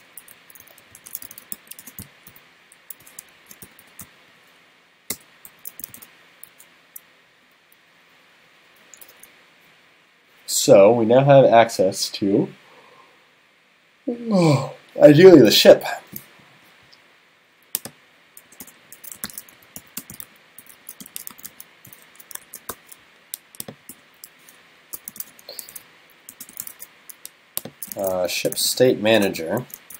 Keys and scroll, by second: 3.4 alt+shift+Left, 22.5 shift+super+Left, 26.7 super+s.